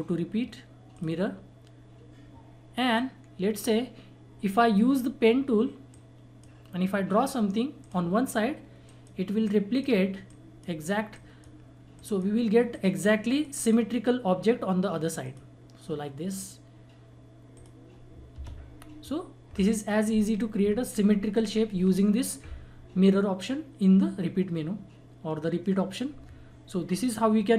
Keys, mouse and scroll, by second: 0.9-5.9 drag, 5.9-11.1 drag, 17.6 click, 18.3 Escape.